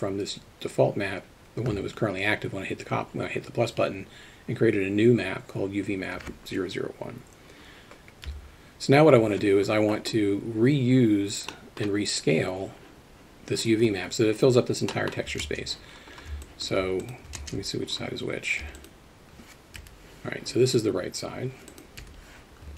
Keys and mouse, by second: 8.3 KP_3, 11.5 middle click, 14.9 middle click, 17.4 ctrl+space, 17.9-18.2 middle drag, 18.6 3, 18.8 click, 19.8 l, 21.7 click, 22.0 l.